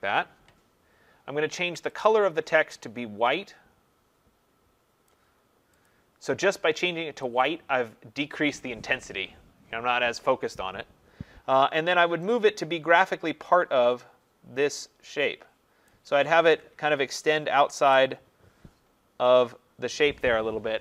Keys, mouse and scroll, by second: 1.9 click, 2.1 click, 5.1 click, 5.9 click, 7.4 click, 11.9 click, 15.9 click, 17.6 Down, 17.8 Down, 19.4 click.